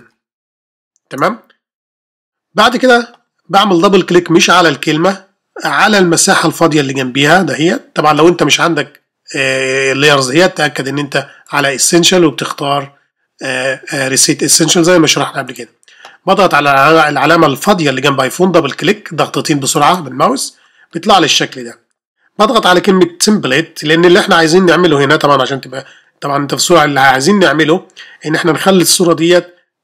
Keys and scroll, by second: 0.0-0.5 typing.